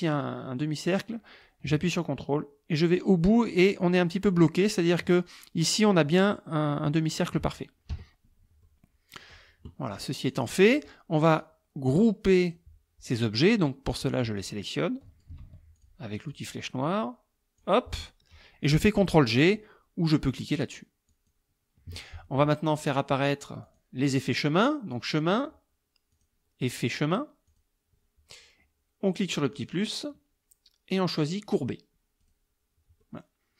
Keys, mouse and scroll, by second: 1.4-5.1 ctrl+drag, 7.2 click, 7.9 KP_Subtract, 8.6 click, 10.4 click, 10.7 click, 11.4-12.7 drag, 14.2-15.4 drag, 15.5 ctrl+z, 15.8 ctrl+click, 16.4-17.8 drag, 21.1 click, 23.7 click, 25.0 click, 26.2 click, 27.5 click, 29.6 click, 32.2 click, 33.0 click.